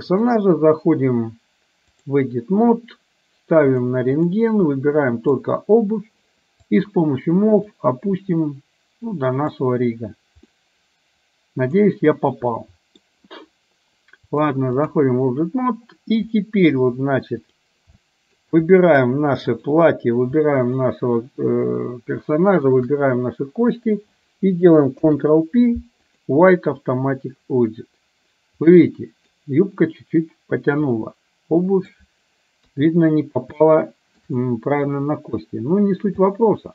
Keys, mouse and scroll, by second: 0.3-2.3 drag, 3.8 click, 4.8 click, 6.7 click, 7.7-9.7 drag, 10.6-12.0 middle drag, 12.7 middle click, 14.3-15.1 drag, 18.0-18.3 shift+middle drag, 19.7 drag, 20.6 shift+click, 22.7 shift+drag, 25.0 ctrl+p, 28.7-29.3 middle drag, 31.1-32.0 middle drag, 32.7 KP_3, 33.7-34.2 shift+middle drag, 36.3-36.7 middle drag.